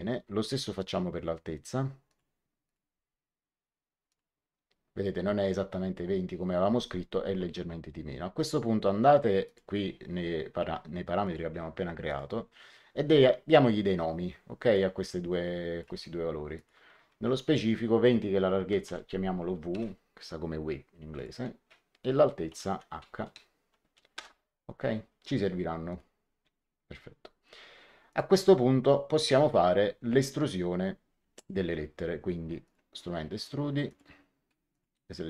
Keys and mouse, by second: 0.7 click, 2.0 click, 4.0 click, 9.4 click, 11.2 click, 14.6 click, 16.5 click, 18.8 w, 19.7 Return, 19.7 KP_Enter, 21.1 click, 22.4 h, 24.1 Return, 24.1 KP_Enter, 25.8 click, 28.0 click, 32.6 click, 33.8 click.